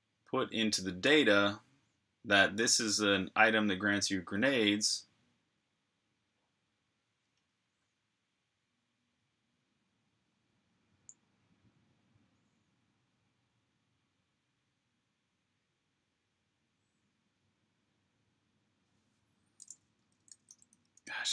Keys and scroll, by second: 20.0-21.3 typing.